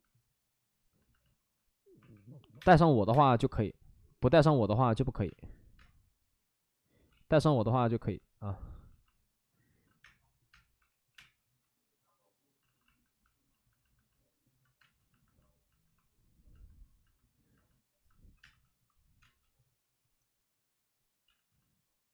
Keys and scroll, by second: 1.9 1, 2.5 1, 2.5 space, 3.4 space, 4.4 ctrl+z, 5.2 space, 5.7 space, 7.0 ctrl+z, 9.6 alt+s, 10.0-11.1 typing, 12.6 alt+s, 14.7 space, 18.3 2, 18.3 space, 19.2 space, 21.2 ctrl+z.